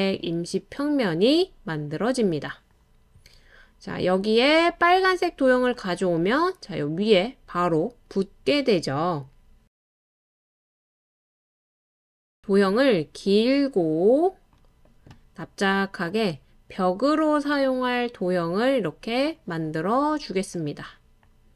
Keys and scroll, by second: 0.9-2.8 typing, 6.4-7.1 typing, 10.3-11.0 typing, 19.0-19.3 typing.